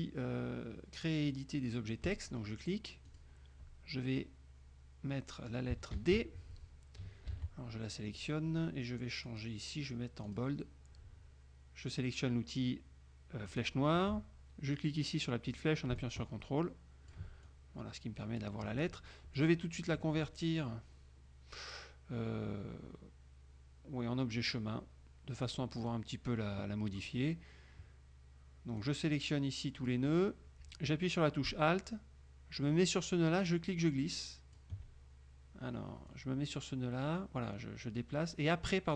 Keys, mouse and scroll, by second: 2.2 click, 3.2 click, 6.1 shift+d, 7.4 ctrl+a, 9.4 click, 10.4 click, 13.6 click, 16.1-17.4 ctrl+drag, 17.6-18.7 ctrl+drag, 19.5 click, 24.5 click, 25.6 click, 26.0 click, 29.0-30.2 drag, 33.6-34.9 alt+drag, 36.2-38.9 drag.